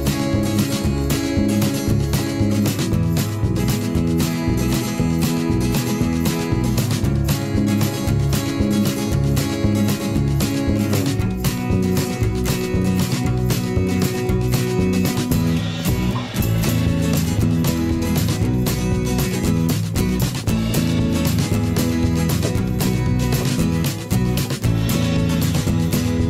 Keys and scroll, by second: 6.7 ctrl+z, 10.9 alt+s, 16.2 ctrl+z.